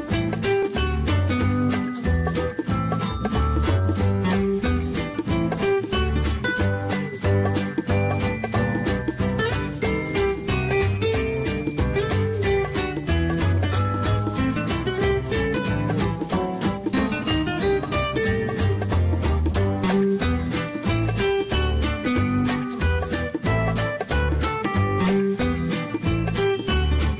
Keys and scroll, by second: 9.7-10.9 typing, 17.5 ctrl+z.